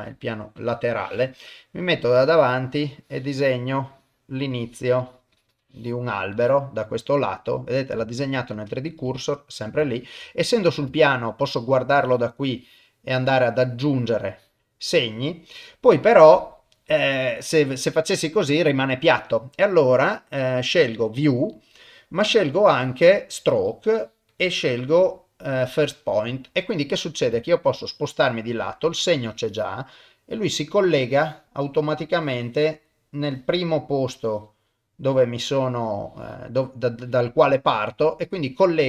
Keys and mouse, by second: 0.3 middle click, 0.6 KP_3, 1.9 click, 2.9 click, 3.9 click, 4.5 click, 5.0 click, 5.3 click, 6.3 click, 6.8-7.9 middle drag, 8.1 ctrl+middle click, 8.5 ctrl+middle click, 9.1 shift+middle click, 9.9 ctrl+middle click, 10.2 middle click, 11.0 ctrl+middle click, 11.8 click, 12.6 click, 12.9 middle click, 14.3 click, 14.8 middle click, 16.4-18.9 middle drag, 19.6-21.7 drag, 22.3-23.7 drag, 24.3-25.8 drag, 25.9-27.3 middle drag, 27.4 shift+middle click, 27.8 middle click, 29.1 click, 29.9 middle click, 31.0 click, 32.1 click, 33.2 click, 34.1 click, 34.7 middle click, 36.0 click, 36.9 click, 37.4-38.4 middle drag.